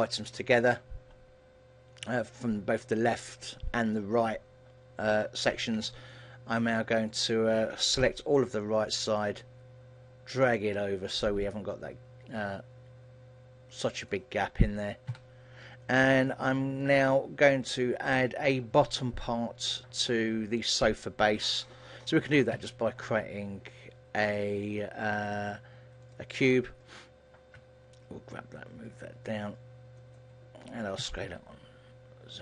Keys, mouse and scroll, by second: 1.0 KP_1, 2.1-2.7 scroll up 1, 2.7-3.1 scroll up 1, 5.9 b, 8.1 ctrl+l, 10.4 click, 14.9 click, 15.2 a, 16.1 scroll down 1, 16.3 shift+middle click, 22.7 shift+a, 27.6 g, 30.3 click, 31.1 s.